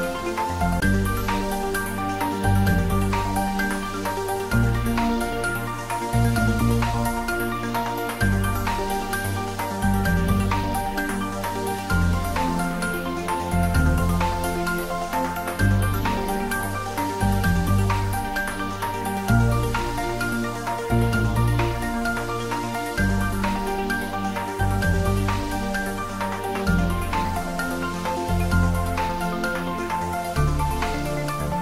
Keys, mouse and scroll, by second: 0.9-2.8 middle drag, 2.6 ctrl+z, 3.0-3.6 middle click, 4.0-4.6 middle click, 4.7 ctrl+z, 5.4-6.9 middle drag, 7.2 g, 7.9 x, 9.6 click, 10.3 ctrl+b, 13.2 click, 13.8 Tab, 14.2-16.3 middle drag, 16.5-17.0 scroll down 1, 17.0 middle click, 17.4-17.8 scroll up 1, 20.6-21.8 middle drag, 22.1 scroll down 1, 24.6 click, 26.1 shift+right click.